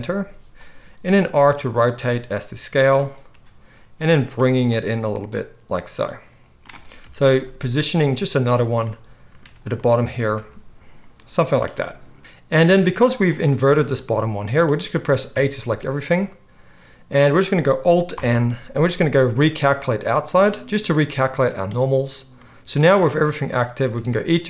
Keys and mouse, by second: 1.0 r, 2.1 s, 3.0-12.2 right drag, 3.3 g, 4.1 z, 7.0 KP_3, 7.5 g, 10.2 s, 12.2 alt+s, 12.2 ctrl+z, 12.2-17.9 middle drag, 15.3 a, 18.1 alt+n.